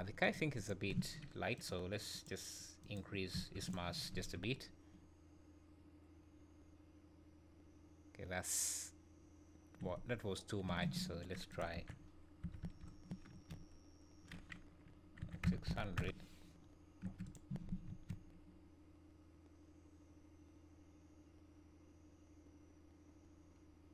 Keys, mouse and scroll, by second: 0.2 click, 0.5 click, 4.1 space, 10.7 Escape, 11.5 click, 12.6 KP_0, 12.7 KP_0, 17.9 space.